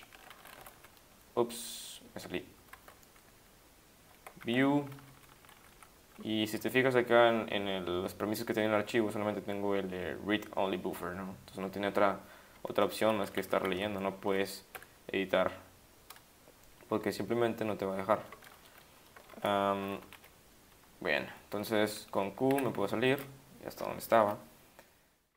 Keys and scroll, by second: 0.2-0.9 typing, 4.6 v, 5.0 Down, 5.1 Down, 5.3 Down, 5.4 Down, 5.6 Up, 5.7 Up, 13.1 Down, 13.2 Down, 13.4 Up, 13.6 Up, 13.7 Down, 14.7 h, 19.4 ctrl+x, 20.0 1, 22.3-23.1 typing.